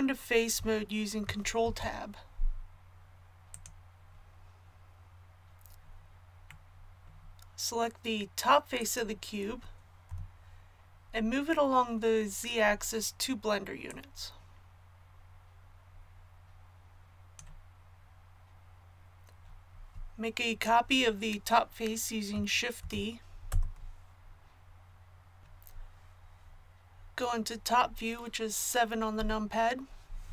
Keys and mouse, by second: 1.6 ctrl+Tab, 10.1 KP_1, 13.9-15.8 drag, 22.8 shift+d, 29.1 KP_7.